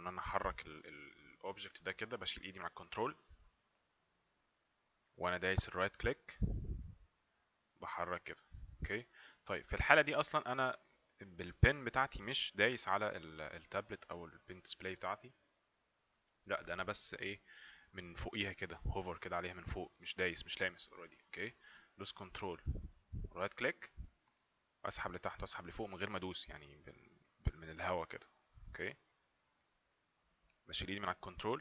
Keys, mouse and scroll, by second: 23.7 ctrl+right click.